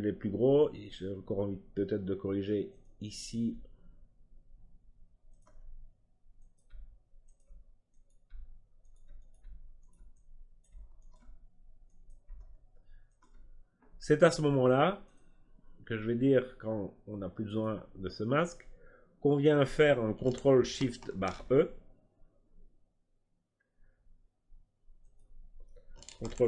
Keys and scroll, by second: 21.0 ctrl+alt+shift+e.